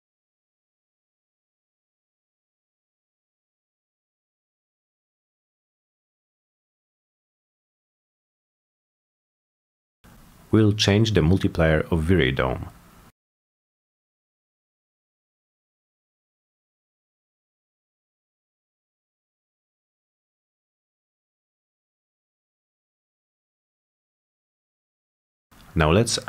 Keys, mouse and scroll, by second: 0.8 click, 2.1 click, 5.2 click, 5.6 click, 5.8 click, 6.2 click, 6.6 click, 8.0-8.4 drag, 10.4 click, 11.7 click, 12.9 click, 14.3 5, 14.8 Return, 19.0 click, 20.3 click, 21.5 click, 22.4 click.